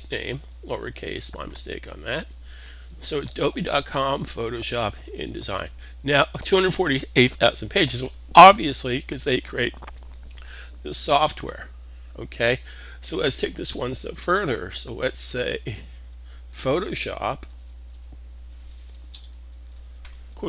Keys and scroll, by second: 0.0-2.3 typing, 4.6 typing, 18.7 space, 19.4 shift+'.